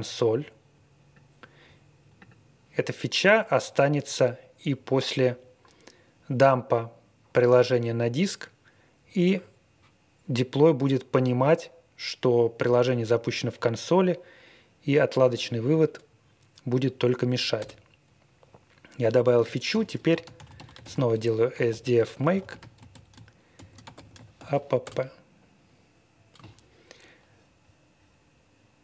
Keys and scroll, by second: 17.6 Return, 19.7-24.8 typing.